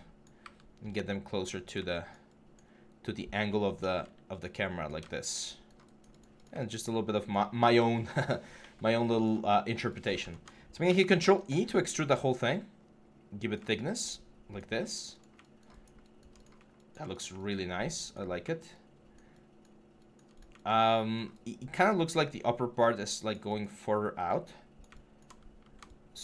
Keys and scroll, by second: 3.1 e, 10.7 ctrl+e, 23.6 4.